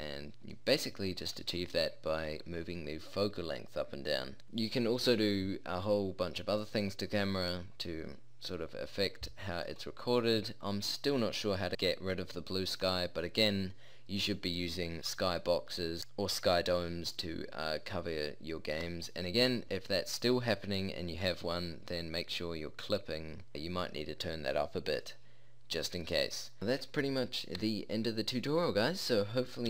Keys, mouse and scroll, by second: 0.6-1.8 middle drag, 4.4-9.1 middle drag, 9.6-9.9 middle drag, 10.1-16.3 middle drag, 26.2-26.6 middle drag.